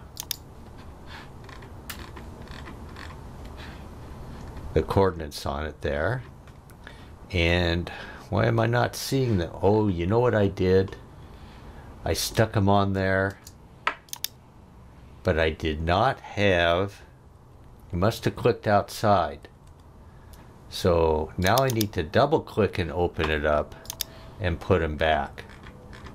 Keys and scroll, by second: 13.3 space, 17.3 super+z.